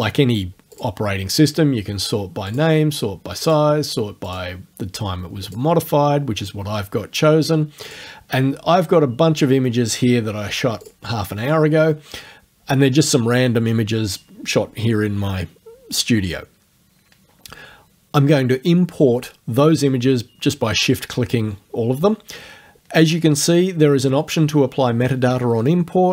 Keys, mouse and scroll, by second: 0.8 click, 2.5 click, 3.5 click, 4.3 click, 5.5 click, 7.9 click, 10.9 shift+click.